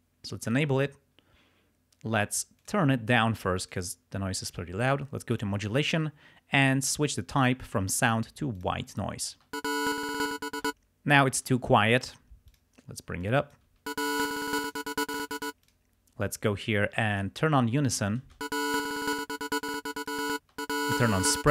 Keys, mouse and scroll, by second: 0.5 click, 2.6 click, 3.2 click, 5.3 click, 7.4 click, 8.6 click, 9.4 space, 10.5 space, 12.5 click, 13.2-14.4 drag, 13.7 space, 14.4 click, 15.4 space, 15.6 click, 17.2 click, 18.3 space, 19.0 click, 19.7 click, 20.3 space, 21.4 space.